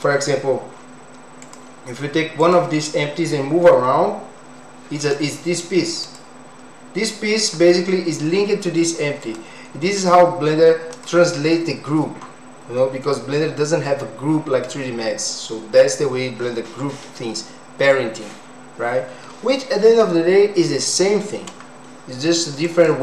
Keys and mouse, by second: 1.4 click, 2.4 click, 4.2 g, 6.0 click, 9.2 click, 10.0 click, 10.9 click.